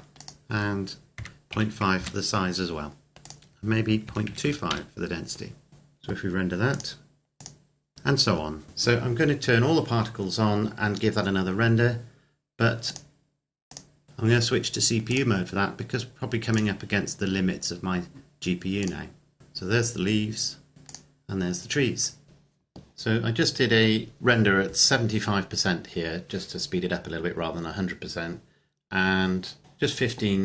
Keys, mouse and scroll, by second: 0.2 click, 1.1 KP_Decimal, 1.4 KP_5, 2.0 KP_Enter, 3.2 click, 4.0 KP_Decimal, 4.2 KP_2, 4.4 KP_5, 4.6 KP_Enter, 5.7 click, 6.8 click, 12.9 click, 15.2 click, 20.9 click.